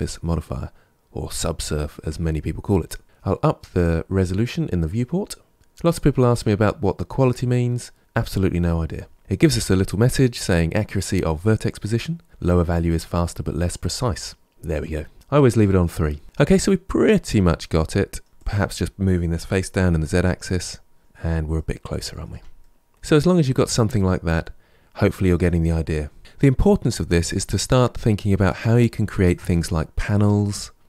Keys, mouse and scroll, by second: 3.0 middle click, 5.5 click, 16.2-17.2 middle drag, 17.2 Tab, 17.5-18.3 middle drag, 18.3 click, 19.2 g, 21.4 middle click, 22.1 Tab, 22.4-24.2 middle drag, 24.2-24.7 scroll down 1, 24.7-26.2 middle drag.